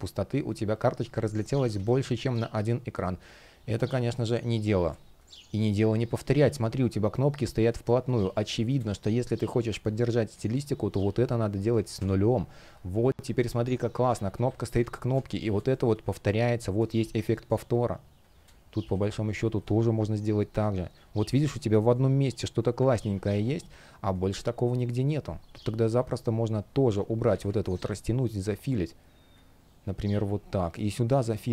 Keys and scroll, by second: 0.6 super+z, 3.4 super+z, 4.6 space, 6.7 shift+p, 7.6 space, 11.7 Return, 12.7 shift+p, 14.4 Delete, 14.8 space, 22.7 super+z.